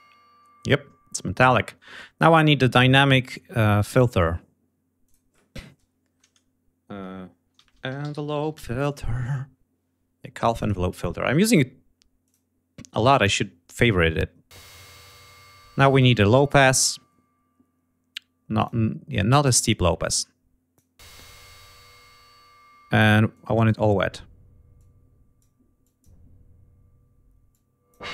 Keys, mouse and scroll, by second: 4.9 click, 7.2-8.9 typing, 10.3 click, 12.1 click, 15.8 click, 18.5 click, 19.9-20.8 drag, 23.2-23.7 drag, 24.6-25.5 drag, 25.7-26.1 drag, 27.4-28.0 drag.